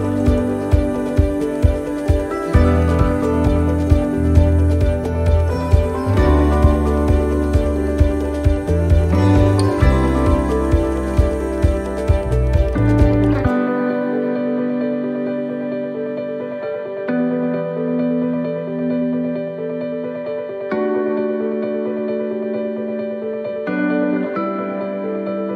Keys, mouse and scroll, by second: 2.4 middle click, 2.4 scroll down 2, 2.4 middle click, 2.8-3.4 scroll up 3, 3.4 shift+middle click, 4.7 scroll down 1, 5.4 scroll down 1, 6.3 right click, 6.3 scroll down 2, 8.6 click, 10.1-10.8 scroll up 4, 10.6 shift+middle click, 11.4 middle click, 11.4 scroll up 1, 12.4 middle click, 12.8-13.4 scroll down 2, 13.2 middle click, 15.0 click, 16.4-17.0 scroll up 3, 16.8 middle click, 19.6 middle click, 19.6 right click, 20.8 middle click, 21.8 right click, 23.0 shift+d, 24.1 click.